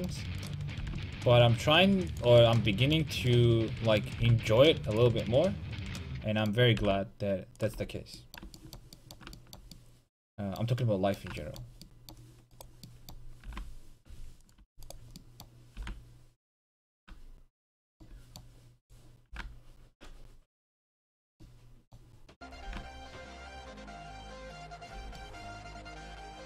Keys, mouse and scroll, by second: 0.5-2.3 right drag, 0.9 g, 2.3 click, 2.6 click, 4.3 g, 5.7-7.6 drag, 6.8 g, 7.8 click, 7.8 a, 8.4-9.4 drag, 11.7 click, 12.6-14.5 right drag, 13.5 g, 14.5 click, 14.7 a, 14.9-16.7 right drag, 17.7 click, 18.0 a, 18.5-21.1 right drag, 19.3 g, 21.2-24.5 drag, 21.3 a, 22.5-24.5 right drag, 22.7 g, 25.0 click, 25.0 a, 25.4 click, 25.6 click.